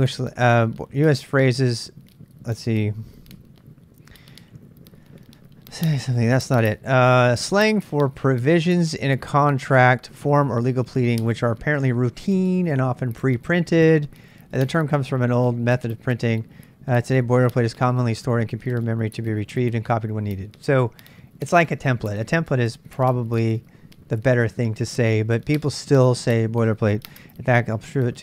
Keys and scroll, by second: 2.6-3.6 typing, 7.7 ctrl+n, 7.9 ctrl+n, 27.5-28.2 typing.